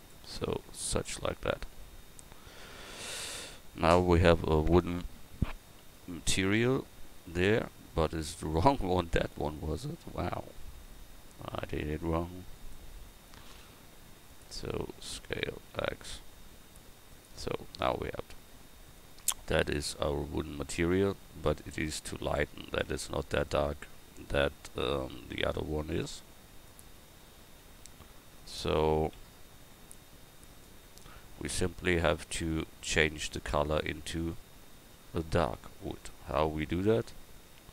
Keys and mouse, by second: 8.2-12.6 right drag, 18.4 Tab, 22.9 Tab, 25.4 s, 31.5 a, 32.4 Tab.